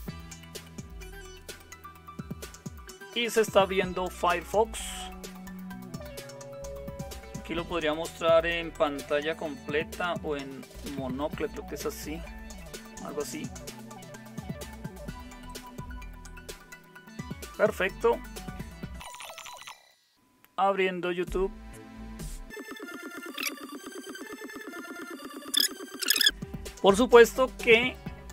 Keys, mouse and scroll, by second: 10.9 super+m, 22.9-24.7 typing.